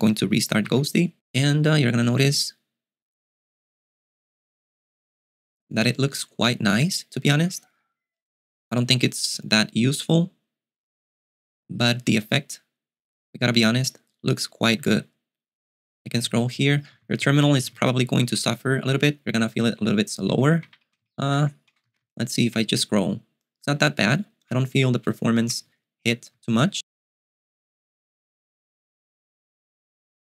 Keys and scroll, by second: 0.9 super+q, 16.2-17.4 typing, 18.5 ctrl+u, 18.5 typing, 18.8 ctrl+d, 19.0 ctrl+d, 20.1 ctrl+d, 20.1 ctrl+u, 20.9 ctrl+u, 21.2 ctrl+d, 21.5 ctrl+d, 21.5 ctrl+u, 21.9-27.2 typing.